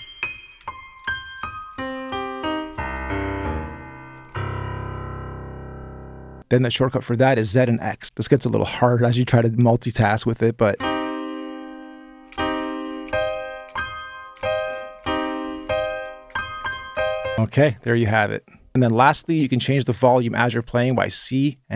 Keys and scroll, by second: 0.0-6.9 typing, 10.5-19.2 typing.